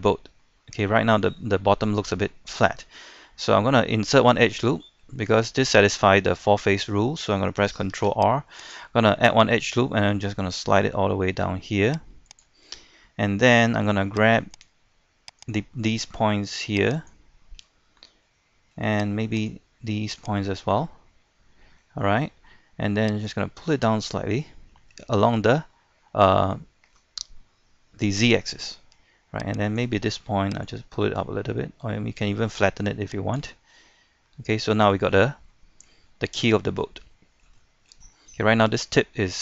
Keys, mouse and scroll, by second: 0.1-2.2 middle drag, 7.9 ctrl+r, 8.6 click, 12.7 middle click, 14.5 right click, 15.4 shift+right click, 17.0 shift+right click, 18.2 middle click, 19.3 shift+right click, 20.2 shift+right click, 20.6-22.4 middle drag, 23.3-24.5 drag, 24.7-29.5 middle drag, 29.7 right click, 30.6-33.6 drag, 34.3 middle click, 34.8 shift+middle click, 36.1 shift+middle click, 36.7 scroll down 1, 36.8 middle click, 37.6 shift+middle click, 38.0-39.2 scroll up 1, 39.2-39.4 scroll down 1.